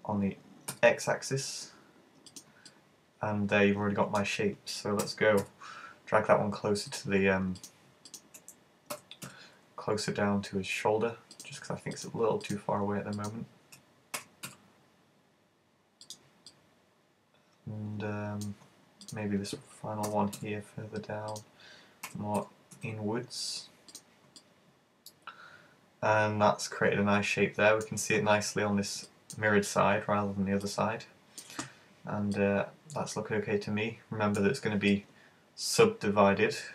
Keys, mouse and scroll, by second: 2.5 click, 2.7 middle click, 5.1 g, 7.1 click, 7.6 right click, 8.1 shift+right click, 9.0 super+g, 11.5 click, 12.0 right click, 12.5 shift+right click, 13.3 shift+right click, 14.2 g, 16.2 click, 16.6 middle click, 19.1 right click, 20.2 super+g, 21.4 click, 22.1 g, 24.1 click, 24.4 middle click, 29.1 middle click, 30.6 middle click, 32.5 middle click, 34.9 middle click.